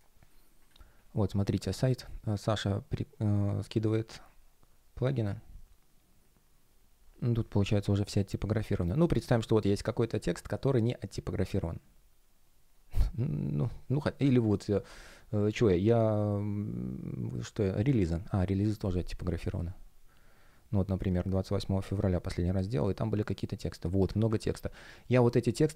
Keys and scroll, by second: 24.4 super+a, 24.6 super+c.